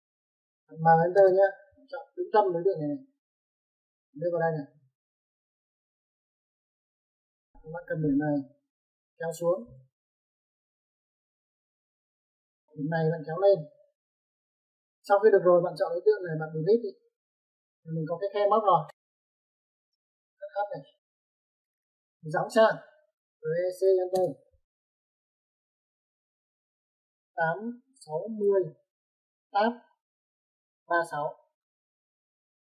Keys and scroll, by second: 1.4 m, 1.6 space, 7.4 Escape, 15.1 Escape, 17.8 Delete, 20.3-21.6 typing, 23.7 Escape, 24.2-24.6 typing, 27.8 typing, 28.8 typing, 30.3 Tab, 32.0 typing.